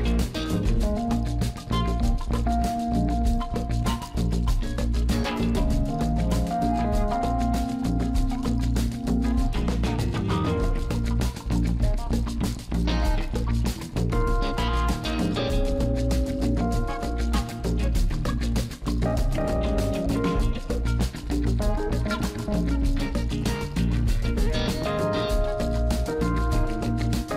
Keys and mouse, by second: 0.4 alt+shift+click, 0.9 middle click, 1.9 alt+shift+click, 2.6 middle click, 3.0 alt+shift+click, 3.4 alt+shift+click, 3.7 middle click, 4.3 alt+shift+click, 4.8 middle click, 7.8-9.0 drag, 9.8-11.8 drag, 13.2-15.5 drag, 16.0 Tab, 19.2 click, 20.9 click, 22.3 right click, 24.1-24.9 middle drag.